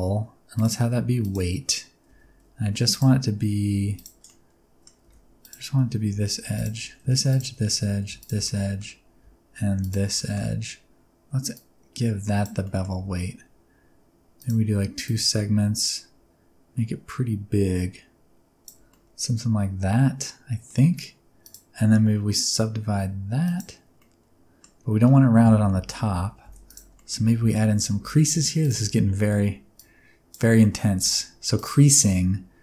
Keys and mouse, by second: 0.5-1.3 drag, 2.1 Tab, 2.6 2, 2.9 click, 3.8 3, 4.3 middle click, 5.0 1, 5.5 alt+click, 6.1 2, 6.6 alt+click, 7.3 alt+shift+click, 8.4 middle click, 9.8 shift+click, 10.2 middle click, 11.5 click, 12.6 middle click, 12.9 Tab, 15.1-18.7 shift+drag, 18.9-20.7 middle drag, 21.4-23.6 drag, 24.0-24.6 middle drag, 25.6 Tab, 26.4 1, 26.7 alt+click, 27.0 middle click, 27.4 alt+z, 28.0 2, 28.6 alt+shift+click, 29.2 alt+z, 29.8 click, 30.6 shift+middle click, 31.0 alt+z, 31.6 click.